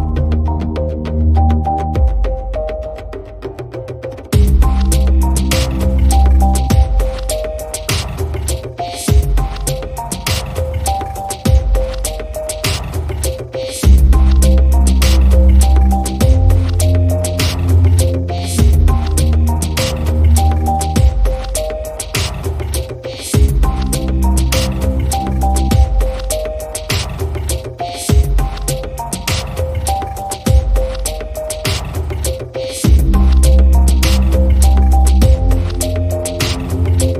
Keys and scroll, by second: 9.1 super+c, 9.4 super+f, 9.9 shift+Right, 21.3 shift+Left, 22.7 shift+Right, 25.3 Left, 28.1 super+g.